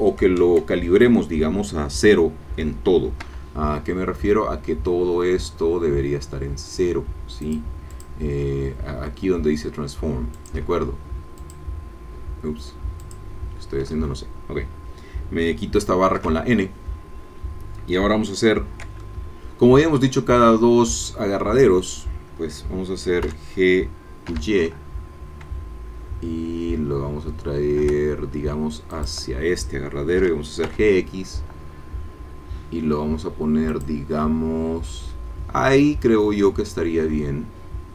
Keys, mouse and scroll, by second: 3.2 n, 7.4 click, 7.9 click, 10.3 click, 11.4-13.3 drag, 13.8 Escape, 16.2 n, 18.5 scroll down 1, 19.0-20.0 shift+drag, 23.2 g, 24.3 y, 28.9 shift+click, 30.2 g, 30.7 x, 33.7-37.9 drag.